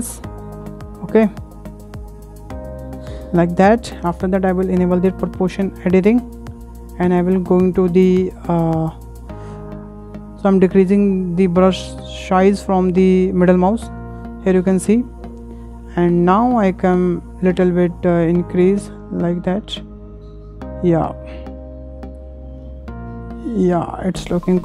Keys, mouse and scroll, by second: 6.1 click, 7.8-9.0 drag, 16.0-16.9 middle drag, 16.9-18.4 drag, 24.1-24.6 middle drag.